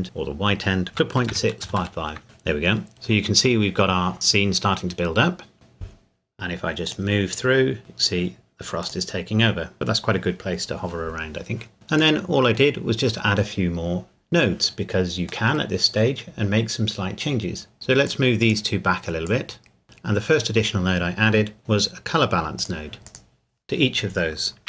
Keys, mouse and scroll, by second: 0.9 KP_Decimal, 1.3 KP_6, 1.6 KP_5, 2.2 KP_Enter, 6.9 click, 8.8 click, 12.2 middle click, 12.6 scroll down 1, 15.5 middle click, 16.3 scroll up 1, 17.7-18.1 scroll down 1, 18.1 click, 22.6 click.